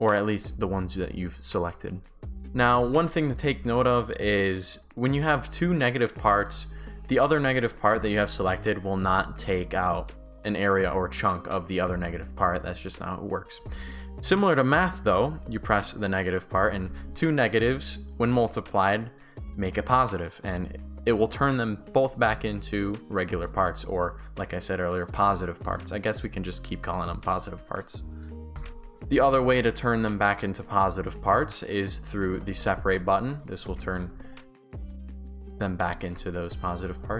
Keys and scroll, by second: 1.2 Pause, 2.4 Pause, 2.9 shift+s, 3.2 shift+w, 28.6 Pause, 33.7 ctrl+z.